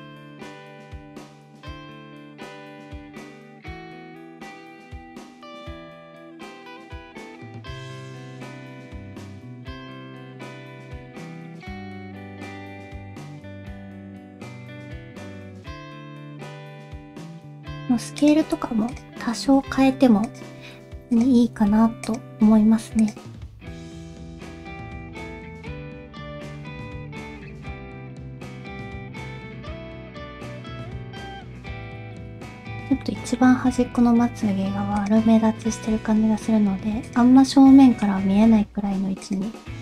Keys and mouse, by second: 0.3 r, 1.2 g, 1.9 click, 2.2 middle click, 2.4-16.3 typing, 2.8 alt+z, 3.5 alt+a, 4.1 middle click, 6.2 middle click, 6.8 middle click, 7.1 shift+middle click, 7.8 middle click, 9.0 middle click, 10.1 middle click, 10.7 middle click, 11.7 middle click, 12.0 middle click, 13.0 alt+a, 14.7 middle click, 15.4 middle click, 15.9 middle click, 16.8 middle click, 17.0 shift+middle click, 17.5 s, 18.4 r, 19.5 r, 20.6 s, 21.6 g, 22.4 r, 23.3 g, 23.9 middle click, 24.1 middle click, 24.6 middle click, 24.6 g, 25.0 middle click, 25.2 r, 25.5 middle click, 25.8 g, 26.5 middle click, 27.0-28.8 typing, 28.2 middle click, 29.2 middle click, 29.7 middle click, 29.9 r, 30.2 g, 31.5 middle click, 32.0 shift+middle click, 32.6 Tab, 33.0 middle click, 33.7 r, 35.3 middle click, 35.9 g, 37.4 middle click, 38.4 r, 39.6 g.